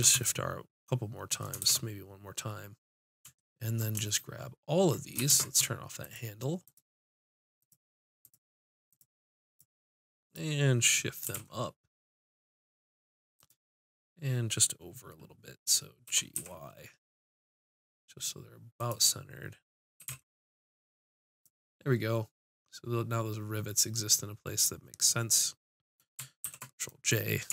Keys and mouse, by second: 1.6 shift+r, 5.3 ctrl+space, 6.0 click, 8.7-11.3 drag, 11.3 g, 13.5-15.3 drag, 16.1 g, 20.0 g, 21.4 click, 26.4 ctrl+j.